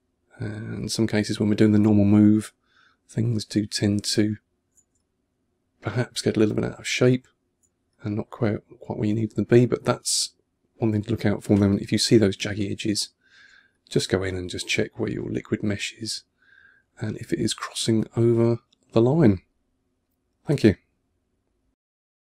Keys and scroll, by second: 3.4 2, 4.8 1, 7.7 1, 13.4 1.